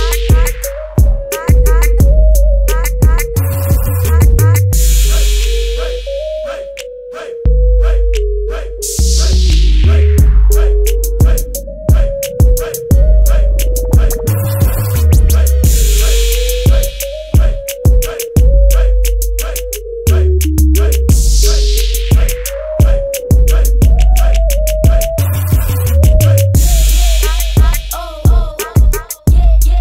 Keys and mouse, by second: 1.8-11.7 drag, 15.0 click, 19.0 click, 23.8-29.8 drag.